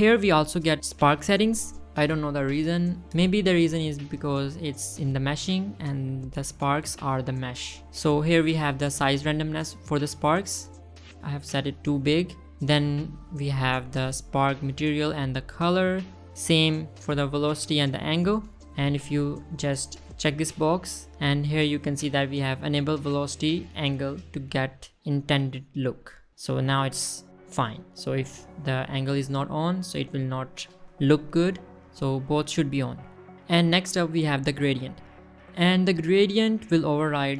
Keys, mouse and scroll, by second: 5.7 shift+middle drag, 7.3 shift+middle drag, 7.8 scroll up 1, 9.0 shift+middle click, 9.6 click, 10.5 click, 10.7 space, 11.3 space, 13.9 click, 17.0 click, 17.4 click, 17.7 click, 18.3 click, 18.5 click, 19.4 click, 20.0 middle click, 25.8-27.1 scroll down 1, 27.1 click, 28.7 click, 29.3 middle click, 32.9 click, 36.0 click, 37.1-37.3 middle drag.